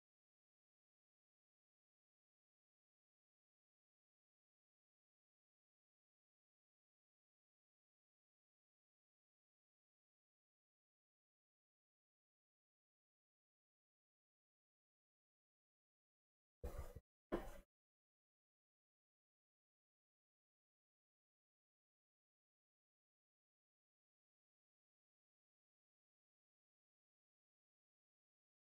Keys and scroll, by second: 28.0 ctrl+m.